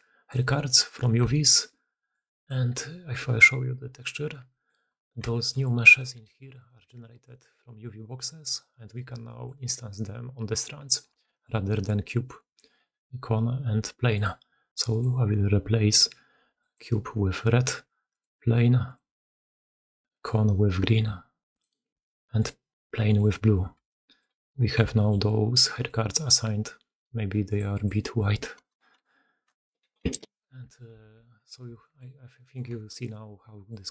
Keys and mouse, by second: 0.0-33.9 typing, 0.2-0.9 middle drag, 1.0 shift+middle click, 1.4 shift+middle click, 2.4-4.0 middle drag, 4.5 middle drag, 5.1 shift+right drag, 6.4 right click, 7.1 right click, 8.4-9.4 drag, 10.7 click, 11.1-14.2 shift+drag, 14.8 click, 18.0 middle click, 22.3 middle click, 23.8-24.1 shift+middle drag, 24.5 middle drag, 24.8 shift+middle drag, 25.6 middle click, 27.3-30.0 middle drag, 30.9 alt+a, 31.2 drag, 31.7 shift+drag, 31.9-32.2 middle drag, 32.2 drag, 32.6 shift+click, 32.9-33.6 drag.